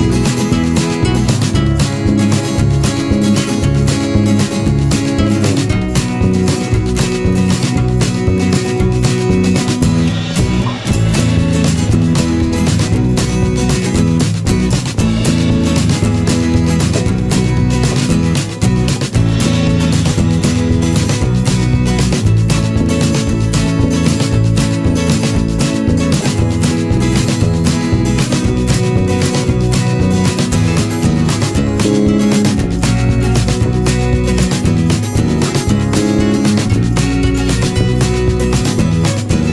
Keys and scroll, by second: 3.5 ctrl+=.